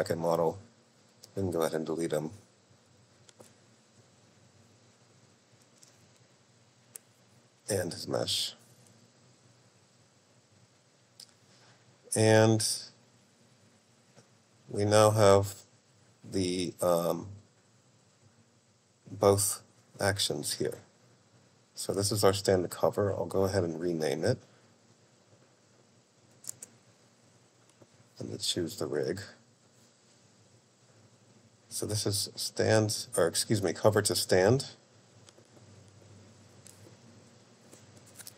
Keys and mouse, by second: 0.3 click, 1.4 x, 5.5 click, 6.1 x, 8.0 click, 9.0 x, 14.3-17.4 drag, 17.4 middle click, 21.8-24.0 drag, 24.4-27.8 drag, 29.0 click, 32.3 click, 33.2-38.1 drag, 37.8 ctrl+BackSpace, 38.1-38.3 shift+middle drag.